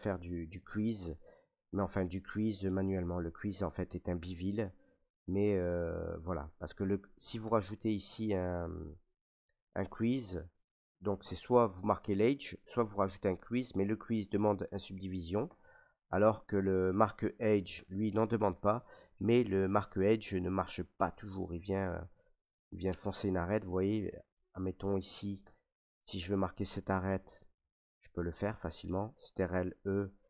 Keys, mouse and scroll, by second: 1.1 middle click, 7.4 Tab, 9.0 middle click, 15.4 Tab, 17.5 middle click, 17.7 Tab, 18.9 middle click, 20.1 middle click, 20.4 middle click, 21.2 middle click, 22.7 middle click, 23.4 shift+middle click, 23.9 middle click, 24.6 shift+middle click, 24.9 middle click, 25.4 Tab, 26.6 right click, 27.9 ctrl+right click, 29.3 ctrl+e.